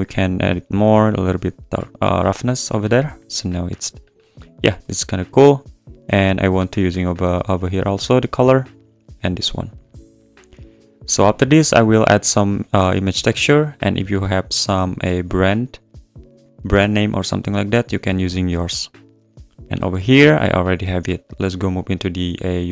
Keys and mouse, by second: 0.7-2.0 drag, 2.4 click, 5.9 click, 5.9 `, 7.3 click, 8.7 click, 9.7 click, 10.5 click.